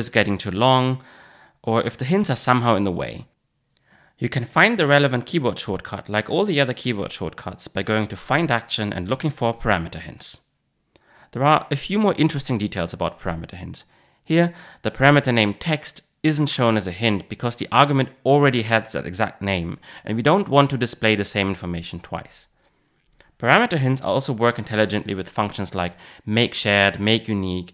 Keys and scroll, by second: 7.5 shift+super+a.